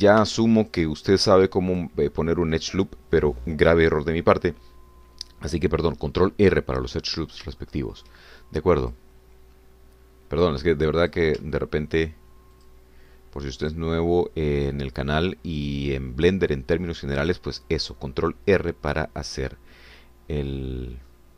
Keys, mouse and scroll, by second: 0.0 Escape, 1.2 ctrl+r, 1.6 ctrl+click, 2.7 click, 8.1 scroll up 2, 8.6 shift+middle click, 10.0 click, 12.0 click, 12.5 shift+click, 13.7 shift+click, 14.8 shift+click, 15.7 shift+click, 16.5 shift+click.